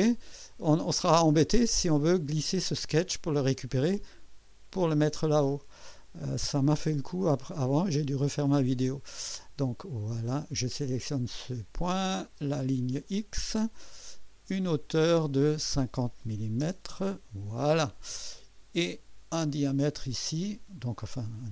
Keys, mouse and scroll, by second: 6.5 middle click, 10.2 click, 12.2 click, 14.6 click, 16.3 KP_5, 16.6 KP_0, 17.1 Return, 19.5 click.